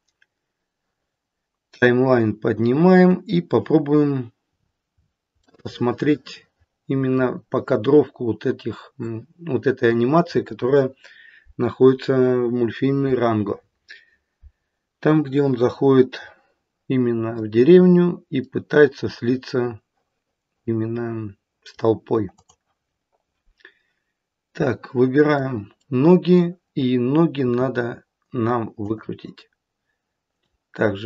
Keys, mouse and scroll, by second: 1.7 click, 4.5-5.4 scroll up 10, 5.4 middle click, 5.6 middle click, 7.9-8.6 scroll up 5, 8.9 middle click, 15.1 middle click, 18.4 middle click, 19.3 middle click, 22.3 click, 24.3 middle click, 24.7 middle click, 25.7 middle click, 27.4 r, 30.2 click.